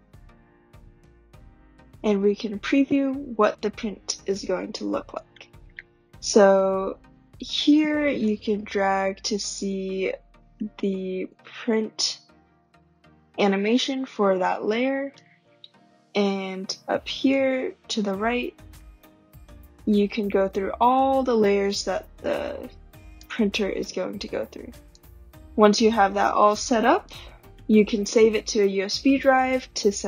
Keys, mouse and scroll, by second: 15.1 click, 23.1 click, 27.1-30.0 drag.